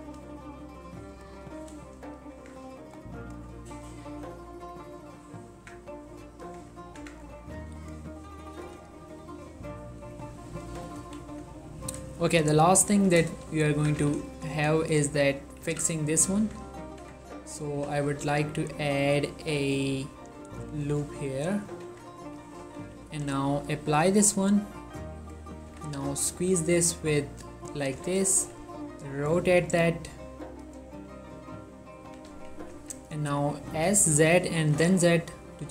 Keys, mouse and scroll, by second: 0.3 g, 1.2 click, 1.5 middle click, 2.5 Tab, 2.8 middle click, 3.3 click, 3.7 ctrl+middle click, 4.0-5.5 middle drag, 5.3 middle click, 5.5 scroll up 2, 5.8 Tab, 6.2 g, 6.5 click, 7.1 Tab, 7.5-7.9 ctrl+middle drag, 7.9 ctrl+click, 8.2-8.9 middle drag, 9.0-10.1 shift+middle drag, 10.3-11.1 shift+middle drag, 11.1 3, 11.7-12.1 ctrl+middle drag, 12.2 shift+middle drag, 12.6-13.3 ctrl+middle drag, 13.4 shift+middle drag, 13.5 scroll up 2, 13.6 drag, 13.9 Tab, 14.1 z, 15.7 z, 16.5 Tab, 17.8 ctrl+r, 18.1-20.2 drag, 22.0 Tab, 22.3-22.7 scroll down 1, 22.7-23.2 typing, 24.5 click, 25.8-26.2 typing, 27.9 click, 28.0 z, 28.5 r, 30.6 click, 32.2-32.8 typing, 33.3 right click, 33.9-34.9 typing.